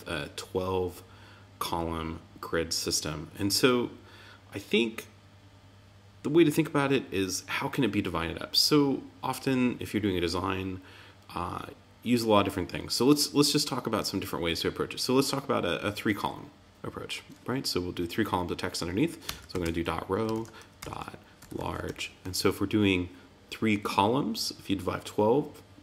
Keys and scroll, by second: 20.3 shift+>.